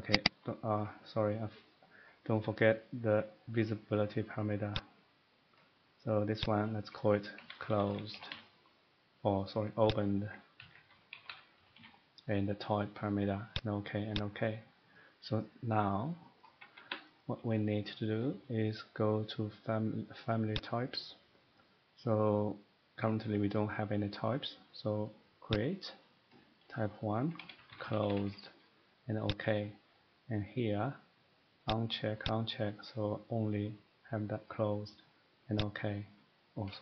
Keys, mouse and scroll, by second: 0.2 click, 0.7 click, 0.7 scroll up 2, 1.0 middle click, 4.8 click, 6.4 click, 7.3-8.8 typing, 10.0 click, 10.1-11.7 typing, 16.5 Escape, 16.7 Escape, 16.8 Escape, 17.8 scroll down 1, 20.5 click, 25.5 click, 27.4-29.6 typing, 29.3 click, 29.9 middle click, 30.0 middle click, 30.1 middle click, 31.6 click, 32.3 click, 35.5 click.